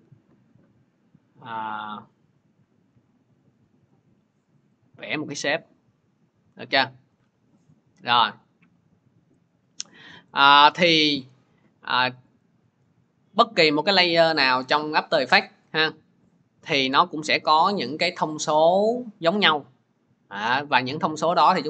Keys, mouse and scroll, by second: 7.0 click, 8.3 click.